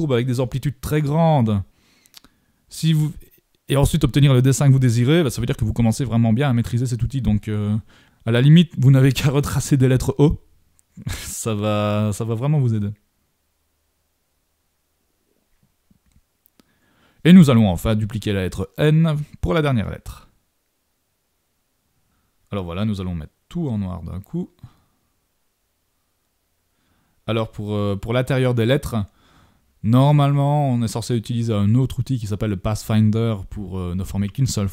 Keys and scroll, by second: 14.1 super+v, 22.6 super+-.